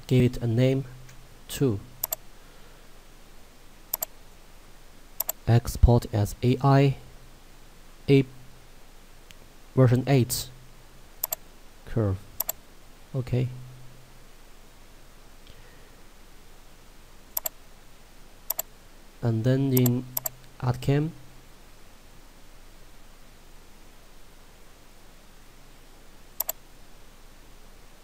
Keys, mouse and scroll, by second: 1.3 2, 2.2 click, 11.5 click, 17.4 click, 26.4 click.